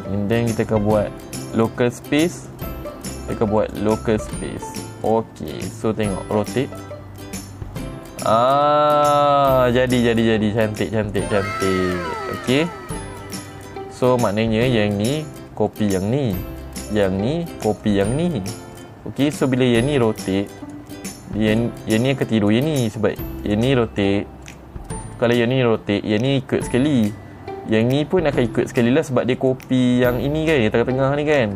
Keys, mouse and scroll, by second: 0.9 click, 2.1 click, 2.9 click, 4.1 click, 5.6 click, 7.0 r, 11.5 right click, 12.6 click, 13.1 click, 13.9 click, 15.1 click, 16.2 click, 17.4 click, 18.4 click, 19.3 click, 20.5 r, 21.2 right click, 22.0 click, 22.9 click, 23.9 click, 24.4 click, 25.0 click, 25.7 click, 26.7 click, 28.2 click, 29.1 click, 29.9 click, 30.5 click.